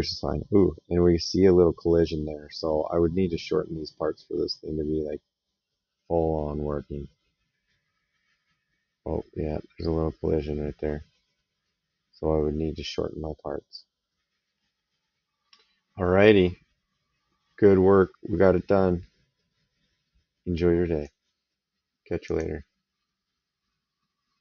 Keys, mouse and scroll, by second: 22.0 click.